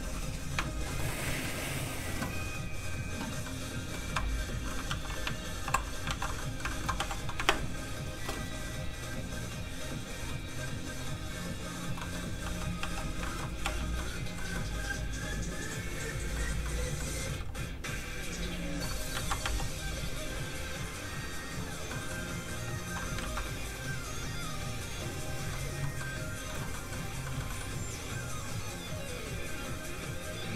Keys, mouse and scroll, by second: 0.8 shift+middle click, 1.0 middle click, 1.1 middle click, 4.8 alt+shift+z, 5.6 alt+z, 6.3 shift+z, 6.4 middle click, 6.7 shift+middle click, 6.9 shift+f, 7.1 click, 7.4 shift+space, 8.1 shift+click, 8.2 shift+space, 9.2 click, 12.0 middle click, 12.1 scroll down 1, 12.4 f, 12.6 click, 12.8 f, 12.9 click, 13.2 shift+middle click, 13.6 middle click, 13.7 click, 13.9 middle click, 17.3 f, 17.5 click, 19.1 ctrl+z, 19.5 f, 19.7 click, 20.1 f, 20.3 click, 21.9 middle click, 22.3 click, 23.2 ctrl+z, 23.7 click, 25.5 middle click, 27.3 shift+middle click, 29.6 click.